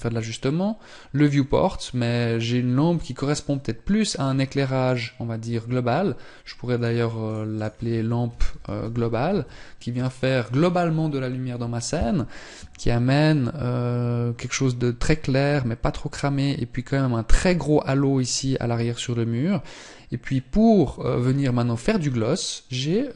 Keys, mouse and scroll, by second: 0.9 middle click, 6.3 click, 21.7 middle click.